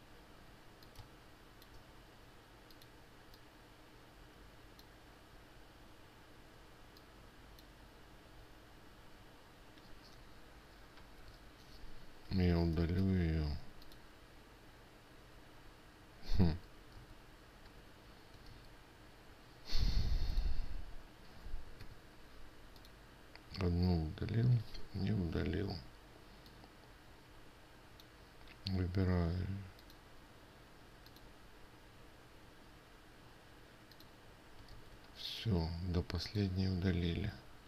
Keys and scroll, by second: 17.0 ctrl+z, 17.5 ctrl+z, 19.8 ctrl+z, 25.3 Escape, 35.3 ctrl+z.